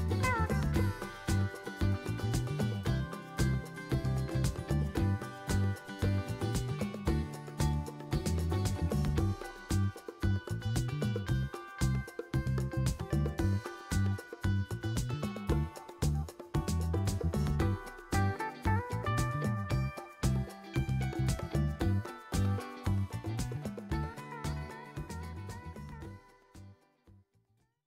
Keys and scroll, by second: 0.7-1.7 typing.